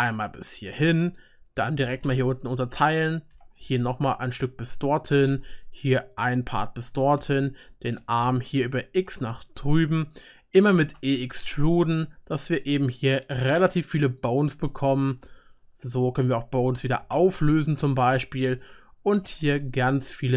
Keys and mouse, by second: 1.7 middle click, 1.7 right click, 1.8 g, 2.2-3.3 right drag, 3.3-6.4 drag, 3.3 e, 5.1 e, 6.4-9.0 right drag, 7.5 e, 10.0 click, 10.9 e, 12.6-15.1 drag, 15.2 ctrl+x, 15.3-16.4 ctrl+right drag, 17.2 ctrl+x, 17.2 ctrl+right click, 17.6-18.7 drag, 18.7 middle click, 18.7 right click, 19.2 e.